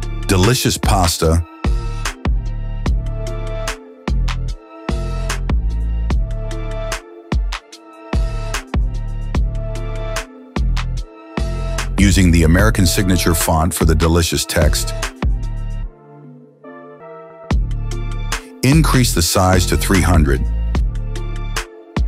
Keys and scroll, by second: 2.3-5.4 typing, 9.8 KP_0, 10.2 Return, 13.9 m.